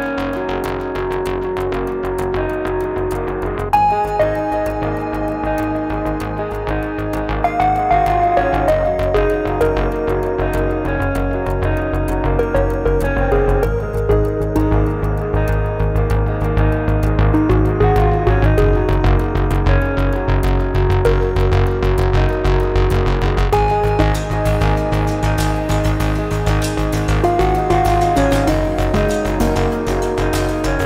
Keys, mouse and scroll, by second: 0.1 middle click, 2.5 click, 3.1-4.7 drag, 5.5 click, 6.4 click, 6.6 click, 6.8 click, 7.0 click, 8.0 click, 8.6-10.0 middle drag, 11.1 click, 11.6-13.4 drag, 14.0-14.5 middle drag, 14.7-16.2 right drag, 16.5-17.1 scroll up 2, 17.1-17.6 middle drag, 17.8 scroll down 1, 18.2-19.3 middle drag, 19.5-19.9 scroll down 1, 22.2-23.8 drag, 24.1-26.2 middle drag, 27.5-29.5 drag, 29.9-30.8 drag.